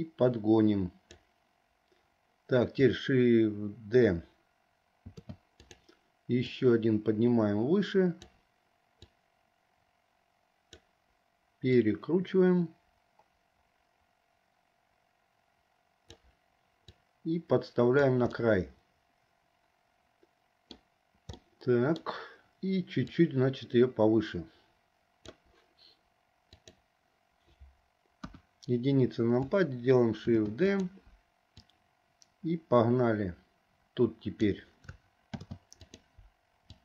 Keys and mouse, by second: 5.2 shift+d, 6.5 click, 6.8-8.4 drag, 9.3-10.9 drag, 11.8 click, 12.0-16.4 drag, 17.1-18.2 drag, 18.5-20.9 middle drag, 21.5 click, 21.5 right click, 23.3-25.4 drag, 28.3 KP_1, 30.3 shift+d, 31.8-34.6 drag, 35.4 shift+d.